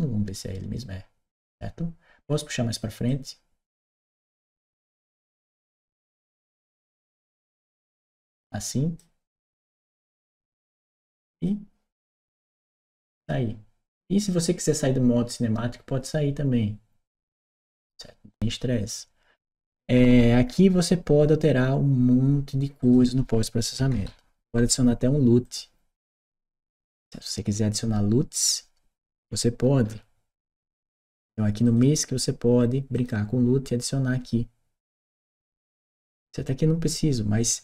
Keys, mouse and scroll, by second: 2.9-8.8 drag, 11.2 click, 20.2-21.2 scroll down 2, 21.2-22.6 scroll down 1, 22.6 click, 25.2 click, 31.5 click, 32.8 click.